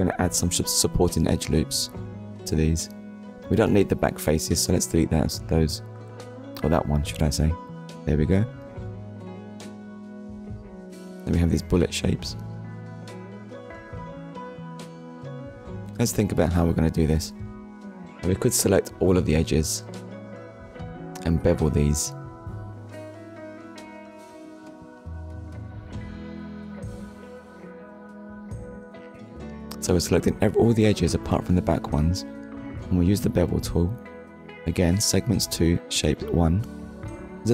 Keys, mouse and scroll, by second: 1.4 middle click, 2.9 Tab, 4.4 click, 5.0 click, 6.3 Delete, 7.4 click, 8.2 Tab, 8.5 middle click, 9.6 Tab, 10.0 middle click, 11.7 click, 12.3 middle click, 18.6 alt+shift+click, 20.2 middle click, 21.5 alt+shift+click, 23.0 middle click, 27.4 alt+shift+click, 28.3 middle click, 30.7 shift+middle click, 32.4 click, 35.9 click.